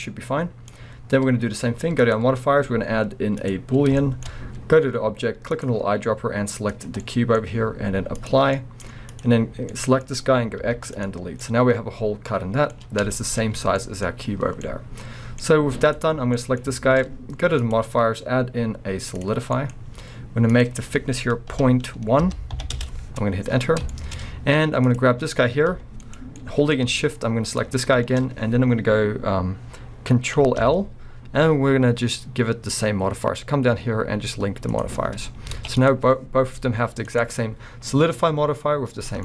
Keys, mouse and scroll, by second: 2.0-4.0 drag, 4.0-5.5 shift+middle drag, 5.5 click, 7.0-8.2 middle drag, 7.4-8.2 scroll up 2, 8.2 click, 8.6-9.1 middle drag, 9.1 click, 9.7-15.8 middle drag, 10.6 x, 11.2 scroll down 2, 13.0 scroll down 2, 13.4-13.8 scroll up 2, 15.8 click, 16.4-17.6 middle drag, 17.1-17.6 scroll up 2, 17.6-19.6 drag, 19.6 middle click, 19.7-20.5 scroll up 2, 20.5-23.9 drag, 22.8 Return, 23.7 scroll down 2, 23.9-24.9 shift+middle drag, 24.2-24.9 scroll up 1, 24.9 click, 25.7 g, 26.2 right click, 26.4-27.6 middle drag, 27.6 shift+click, 30.6 ctrl+l, 35.5 alt+a, 35.8 click, 36.6 g, 37.2 right click.